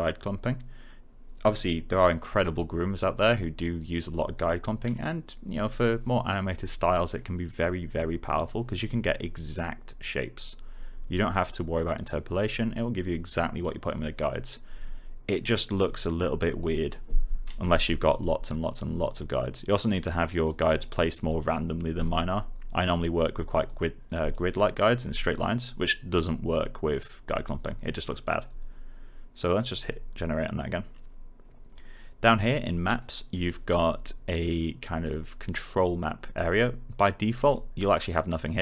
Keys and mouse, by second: 15.5 click, 17.9 right click, 20.7 alt+middle click, 21.2 alt+click, 23.6 click, 27.7 click, 37.3 click.